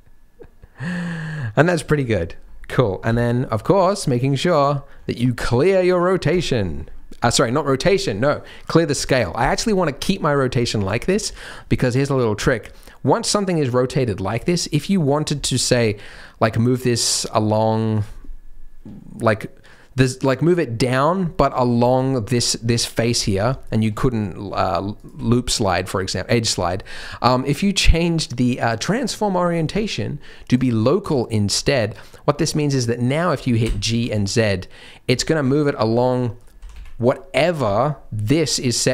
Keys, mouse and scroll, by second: 2.0-2.3 scroll down 4, 2.3-3.0 scroll up 2, 3.0 scroll up 1, 3.0 n, 4.4 click, 5.3 ctrl+a, 6.8-7.5 scroll up 3, 10.3-10.7 scroll down 3, 10.7 shift+middle click, 11.0 scroll up 3, 11.3 Tab, 11.7 middle click, 12.7 middle click, 12.7 shift+middle click, 14.0-15.0 scroll up 5, 15.0 click, 15.4 shift+click, 15.7 middle click, 17.2 middle click, 17.9 click, 21.6 scroll down 1, 21.8 middle click, 22.8 middle click, 23.2 scroll up 1, 24.0-24.4 scroll down 1, 24.6 shift+click, 24.9 shift+click, 26.4-27.0 scroll up 3, 26.8 middle click, 27.8 click, 31.2 middle click, 33.6 g, 35.6 middle click, 36.5 g.